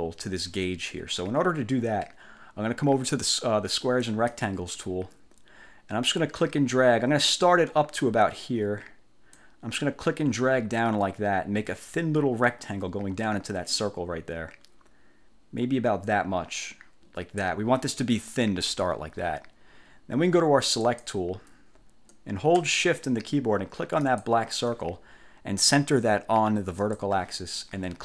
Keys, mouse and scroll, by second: 4.1 click, 9.5-17.7 drag, 21.0 click, 24.2 shift+click, 26.9 click.